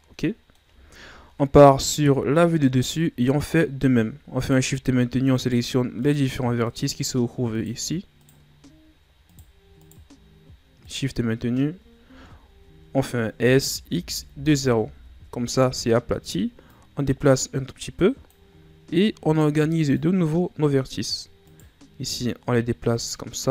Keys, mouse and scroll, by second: 0.8-1.8 shift+scroll up 1, 2.0 KP_7, 3.1 scroll up 1, 4.4 right click, 5.3 shift+right click, 6.0 shift+right click, 6.6 shift+right click, 7.5 shift+right click, 8.2 shift+right click, 8.5-9.3 shift+scroll up 3, 9.3 shift+right click, 9.8 shift+right click, 10.1-10.8 shift+scroll up 3, 10.8 shift+right click, 11.2-11.9 shift+scroll up 4, 11.9-12.5 scroll down 9, 13.3 s, 16.7-18.5 drag, 18.5-19.0 scroll up 3, 19.3 right click, 20.0-21.5 drag, 21.5 right click, 22.1-23.5 drag.